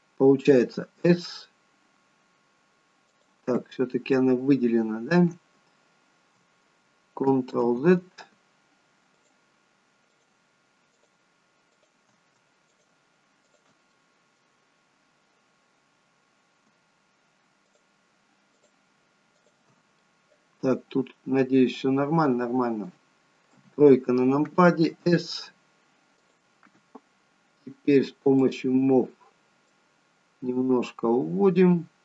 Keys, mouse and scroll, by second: 1.0 s, 3.7-4.6 scroll up 2, 7.6 ctrl+z, 9.2-13.9 shift+click, 13.9 middle click, 14.7-15.5 scroll down 1, 16.5-17.0 scroll down 6, 17.7 shift+click, 20.0 middle click, 20.0-20.4 scroll down 1, 23.6 KP_3, 24.9 s, 28.5 click, 29.7 click.